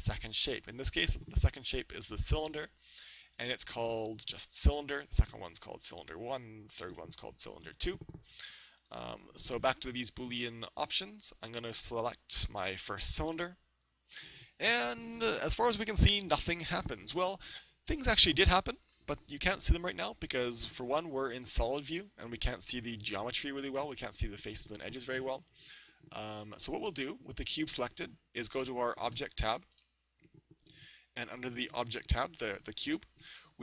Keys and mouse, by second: 3.2 right click, 5.2-8.5 right drag, 8.8 right click, 11.8-14.1 drag, 17.5-19.4 middle drag, 19.9-21.9 middle drag, 30.7-33.5 drag.